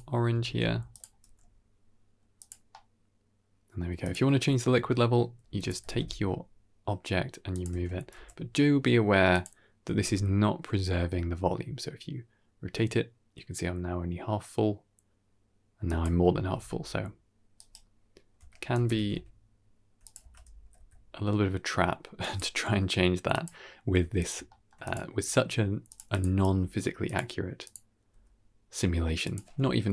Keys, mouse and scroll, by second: 0.3 ctrl+space, 0.8 click, 1.1 g, 2.6-3.4 middle drag, 3.4 click, 3.5-3.8 middle drag, 3.9 drag, 4.3-4.6 scroll up 2, 4.6 Tab, 5.4 a, 5.5 g, 7.6 Tab, 8.0 g, 9.7 r, 16.3 r, 18.3 Tab, 18.6 g, 20.1 Tab, 20.5 r, 22.6 g, 23.9 g, 24.4-24.7 shift+middle drag, 24.7 click, 25.1 g, 26.0 click, 26.3 g, 27.5 click, 28.0 g.